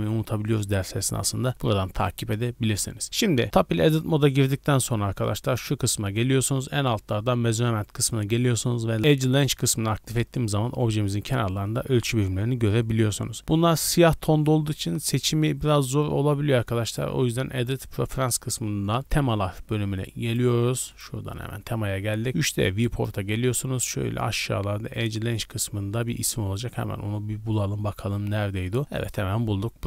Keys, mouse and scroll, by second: 4.5 t, 5.4-11.4 drag, 11.4 scroll up 2, 13.1-13.4 scroll up 3, 16.8-18.1 drag.